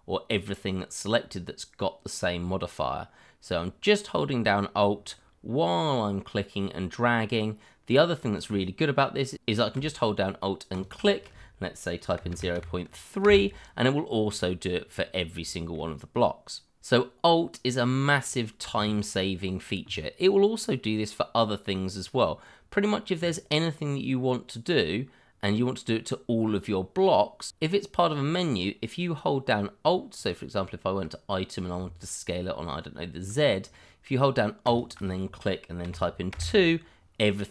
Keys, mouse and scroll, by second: 10.7 alt+click, 11.8 click, 12.2 0, 12.5 3, 13.2 Return, 14.2-14.6 scroll down 1, 15.5 shift+middle click, 15.6 middle click, 15.7 shift+middle click, 20.6-22.1 scroll down 1, 30.2 click, 34.6 click, 35.8 2, 36.3 Return.